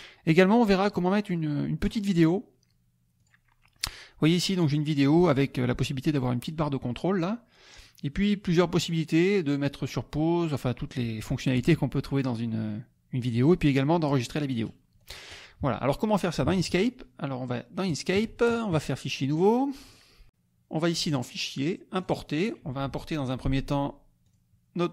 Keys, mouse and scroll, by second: 0.9 click, 1.8 right click, 3.1 click, 7.7 right click, 15.0 click, 16.5 alt+Tab, 17.8 alt+click, 19.3 click, 19.9 click, 21.1 click, 22.0 click, 24.2 click.